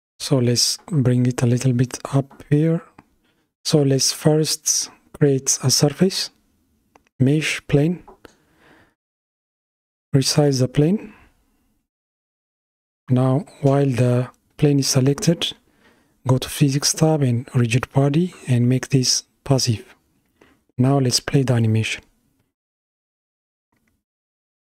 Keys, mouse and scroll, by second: 3.0-4.0 middle drag, 4.0 click, 5.3 shift+a, 9.3 s, 16.9-20.4 drag, 21.0-24.2 middle drag, 24.3 space.